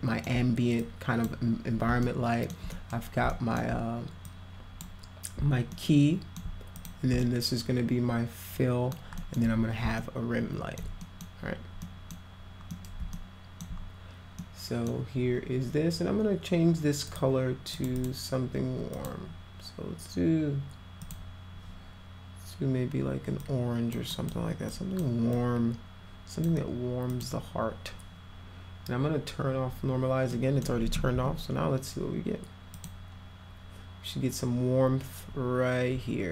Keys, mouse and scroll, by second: 0.8 click, 2.0-2.5 alt+middle drag, 2.7 middle drag, 3.3 alt+middle drag, 4.3-4.8 drag, 5.7-6.4 alt+middle drag, 6.8 click, 7.2-8.9 alt+middle drag, 9.2 alt+middle click, 10.0 alt+middle click, 11.0 middle click, 11.8 middle click, 12.7 middle click, 13.1 alt+middle click, 14.4 middle click, 17.1 click, 17.7 click, 18.0 click, 18.9 click, 21.0 click, 23.4 click, 24.1 click, 24.7 click, 25.3-26.4 drag, 27.1 click, 30.3-30.6 middle drag, 32.8 click.